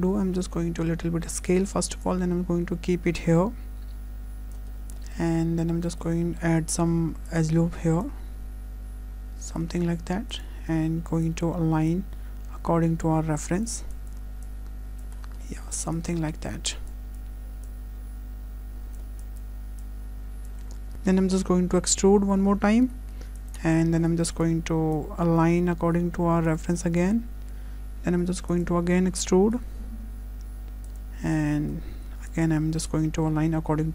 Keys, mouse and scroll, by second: 0.1 s, 2.0 click, 4.7 scroll up 2, 5.0 shift+middle click, 5.4 Tab, 5.9 shift+middle click, 7.3 click, 8.4 click, 10.3 click, 10.6-11.3 scroll up 1, 11.3 click, 11.3 scroll up 1, 13.6 click, 15.0 click, 15.2 scroll down 3, 15.4 shift+middle click, 16.0 click, 16.9 click, 19.2 click, 19.8 click, 20.9 ctrl+z, 21.8 e, 24.0 1, 24.3 click, 24.9 click, 26.7 shift+middle click, 28.2 2, 28.5 click, 29.2 e, 31.9 1, 32.9 click.